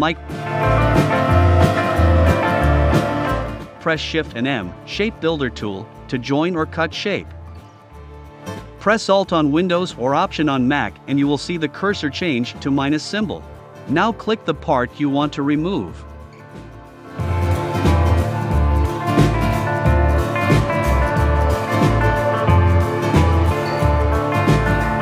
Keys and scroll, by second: 24.3 i.